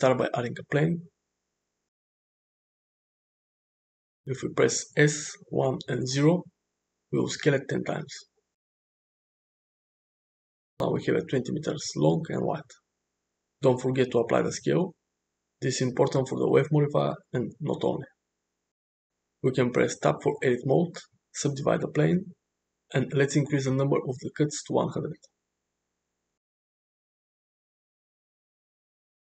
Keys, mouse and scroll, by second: 1.9-3.9 middle drag, 5.4 s, 8.3-9.7 middle drag, 13.3 ctrl+a, 17.1-18.3 middle drag, 19.5 Tab, 20.9-21.7 right drag, 23.5-25.0 drag, 24.8 0, 28.7 middle click.